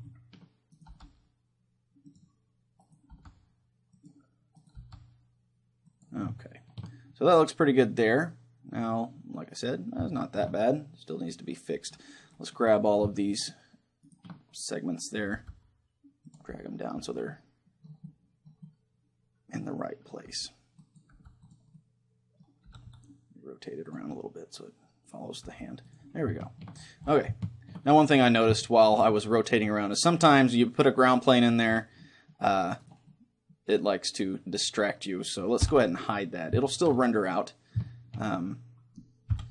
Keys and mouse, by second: 0.9 click, 0.9 g, 1.7 right click, 3.1 g, 4.0 right click, 4.8 g, 5.9 right click, 6.5-8.0 drag, 8.0-12.5 middle drag, 12.9-15.9 right drag, 15.4 g, 15.9 middle click, 16.4-18.2 drag, 18.2-20.8 middle drag, 20.3 g, 21.0-23.3 drag, 21.2 g, 21.8-22.8 middle drag, 22.8 r, 23.3 middle click, 23.9-25.8 drag, 25.5 g, 25.8 middle click, 26.0-27.8 drag, 27.8-30.0 middle drag, 30.0-31.7 drag, 32.0-34.9 middle drag, 32.9-34.6 right drag, 35.7 h, 36.7-39.5 middle drag.